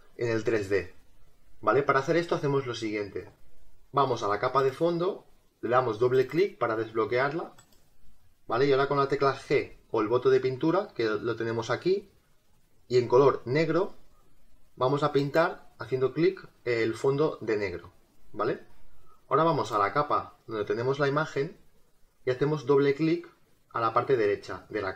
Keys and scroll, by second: 3.3 space, 4.6 space.